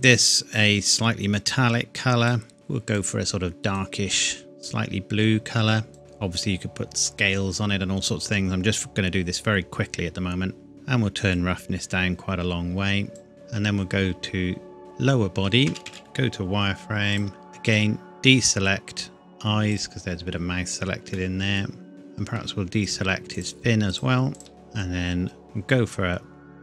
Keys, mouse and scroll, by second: 1.0 click, 6.0-8.3 scroll down 1, 11.3 click, 15.6 a, 15.8 a, 16.0 z, 17.1 click, 21.1 middle click, 21.9 scroll up 1, 22.8 shift+click.